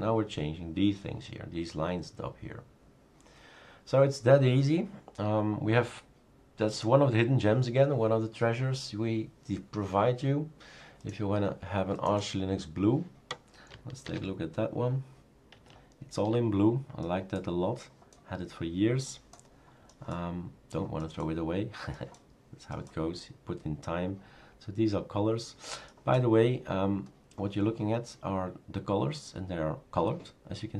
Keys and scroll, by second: 14.2 super+f.